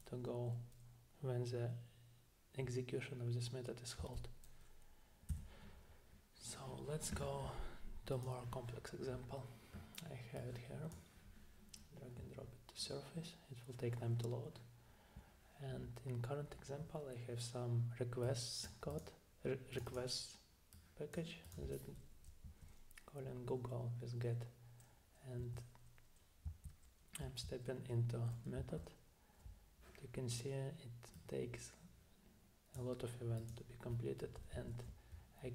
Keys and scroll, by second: 4.0 Down, 5.3 Down, 22.4 Down, 25.4 Right, 26.5 Down, 27.2 Down, 28.6 Down, 34.5 Down.